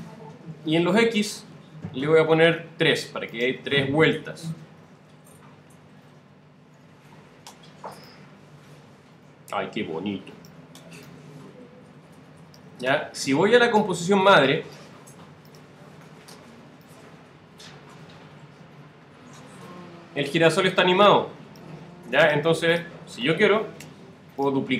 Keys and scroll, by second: 1.5 alt+super++, 5.8 alt+Return.